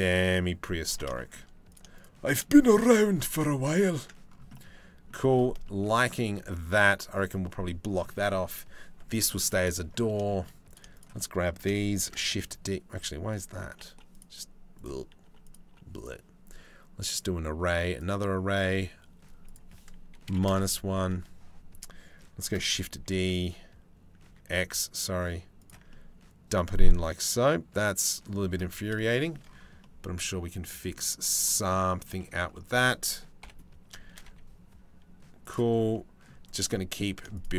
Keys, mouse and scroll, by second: 0.8 middle click, 1.3 right click, 2.4 shift+d, 4.2 middle click, 5.3 shift+middle click, 5.6 middle click, 6.1 shift+middle click, 8.7 middle click, 9.1 middle click, 9.9 shift+middle click, 10.6 shift+middle click, 11.6 shift+d, 13.0 click, 13.6 Delete, 14.9 Delete, 15.3 Delete, 15.6 click, 16.8 click, 19.1-20.1 drag, 22.1 shift+d, 25.5-27.9 middle drag, 28.8 shift+middle click, 29.4-30.6 middle drag, 31.0 shift+middle click, 31.3 click, 31.8 shift+middle click, 33.0 KP_7, 33.7 shift+d, 35.6 middle click.